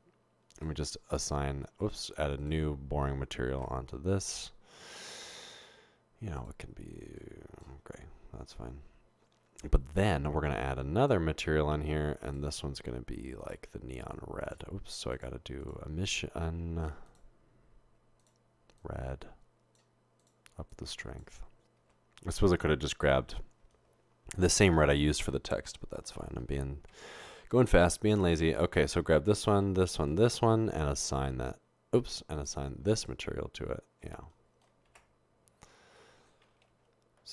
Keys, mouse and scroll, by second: 0.6 click, 1.8-2.3 drag, 2.4 click, 3.7 Tab, 6.4 drag, 7.2 click, 8.5 Tab, 12.3 drag, 13.4 click, 14.1 click, 15.1 click, 15.6 click, 18.2-19.8 drag, 20.2 click, 22.0 Tab, 26.9 Tab, 27.8 Tab, 31.2 click, 32.4 click, 33.0 click, 35.0 Tab, 37.2 0.